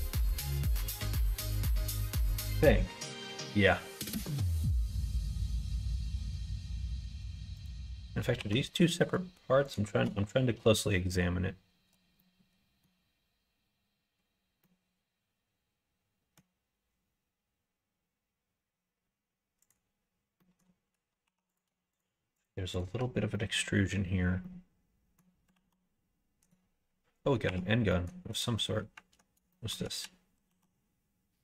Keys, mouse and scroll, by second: 4.0 middle click, 4.6 click, 5.0 Tab, 7.5 click, 8.3 2, 8.8 click, 9.6 shift+click, 12.1 middle click, 14.6-16.3 middle drag, 19.6 click, 20.3 middle click, 21.2 3, 21.9 shift+click, 22.3 shift+click, 23.3 middle click, 24.4 middle click, 25.5 ctrl+r, 27.4 1, 27.9 middle click, 28.3 click, 29.5 middle click, 30.4 ctrl+r.